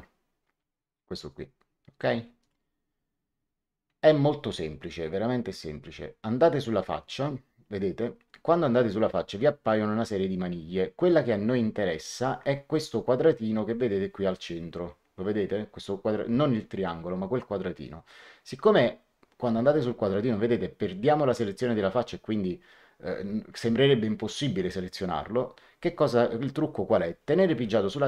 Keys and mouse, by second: 2.3 click.